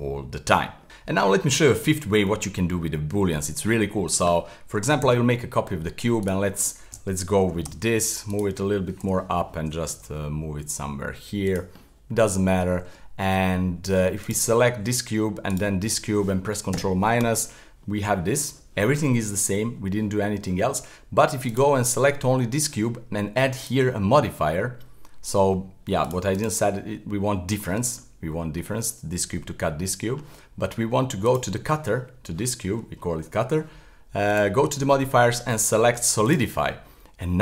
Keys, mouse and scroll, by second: 2.8-3.4 scroll up 1, 3.4-5.0 middle drag, 5.0 shift+d, 7.4 g, 9.0 KP_7, 9.9 g, 11.8-14.2 middle drag, 14.2 right click, 15.5 shift+right click, 16.7 ctrl+KP_Subtract, 17.8-20.9 middle drag, 21.4 click, 23.6-26.1 drag, 26.4 click, 28.0-31.2 middle drag, 31.2 click, 34.3-36.8 drag, 36.8-37.4 middle drag.